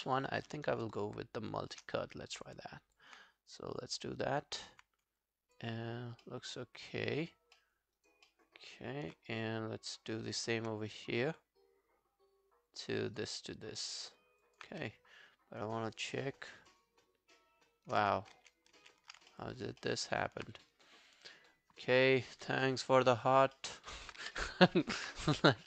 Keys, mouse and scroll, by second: 0.8 shift+right click, 2.7 alt+click, 4.2 right click, 5.2 alt+click, 6.3 alt+middle click, 6.7 alt+scroll down 1, 6.9 alt+click, 7.6 alt+middle click, 8.0 alt+right click, 8.3 alt+middle click, 13.2 right click, 13.9 alt+middle click, 14.5 alt+click, 14.7 w, 14.9 right click, 15.9 Right, 16.5 alt+scroll down 1, 16.7 alt+click, 18.4 ctrl+z, 18.8 ctrl+z, 19.3 alt+middle click, 19.6 alt+right click, 19.8 alt+middle click, 20.1 alt+right click, 20.9 right click, 22.7 alt+middle click, 23.8 alt+right click, 24.2 q.